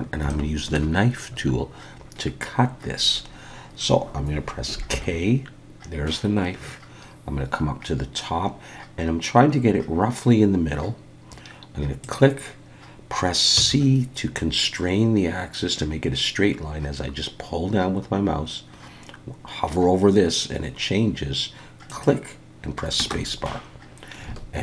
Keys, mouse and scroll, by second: 0.3 shift+middle click, 4.9 k, 24.3 alt+a.